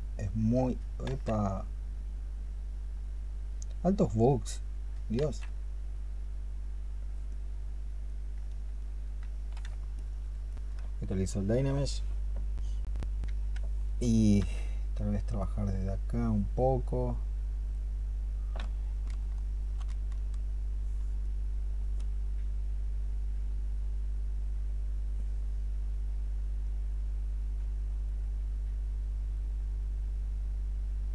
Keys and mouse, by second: 0.9 ctrl+z, 5.0 ctrl+z, 9.8 ctrl+click, 19.0 ', 19.5 ', 24.0 double click, 24.4-26.0 double click, 26.5 double click, 27.2 double click, 27.5 double click, 27.9-31.0 double click.